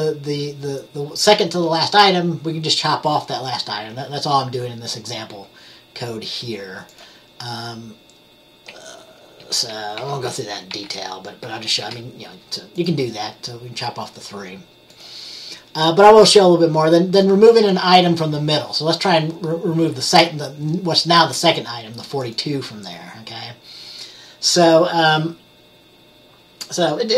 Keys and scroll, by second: 9.5 F10, 10.1 F10, 10.8 F10, 11.5 F10.